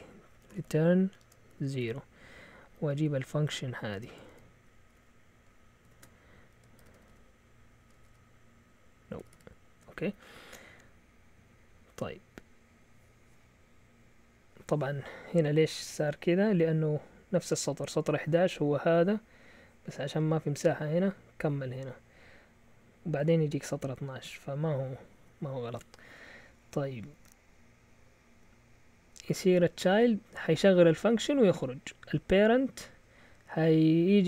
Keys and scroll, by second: 0.0-2.7 typing, 3.9-9.3 typing, 11.8 Down, 29.9-32.3 typing.